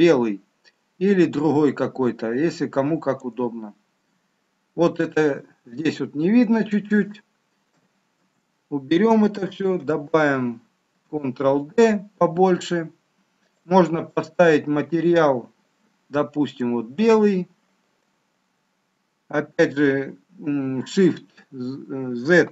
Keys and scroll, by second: 3.8 shift+z, 8.2 ctrl+z, 9.6 ctrl+d, 10.9 ctrl+d, 20.9 shift+z.